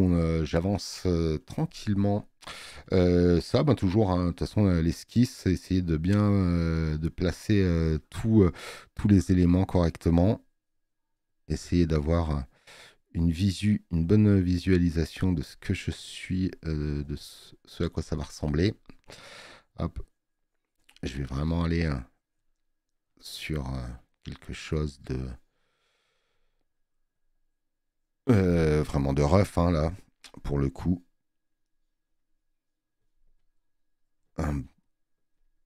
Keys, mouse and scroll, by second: 0.9 click.